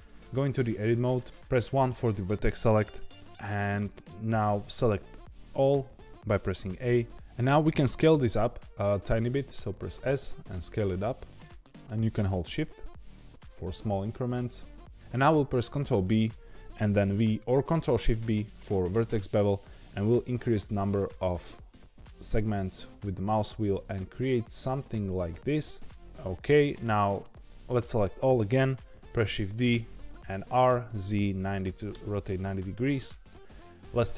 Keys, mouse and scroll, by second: 0.1 Tab, 1.2 1, 5.8 a, 6.9 scroll up 2, 9.7 s, 15.9 ctrl+b, 27.3 a, 29.2 shift+d, 30.5 r, 33.0 middle click, 33.9 Tab.